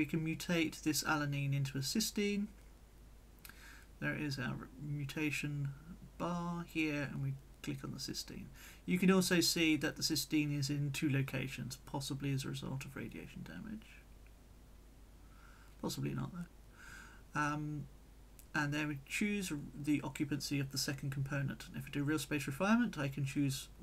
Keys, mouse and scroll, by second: 0.7 click, 1.6 click, 2.8 click, 3.6-5.2 drag, 6.6 click, 7.4-12.0 drag, 12.8 click, 16.2 click, 17.9 click, 19.0 click, 19.9-21.7 drag, 22.5 click, 23.6 click.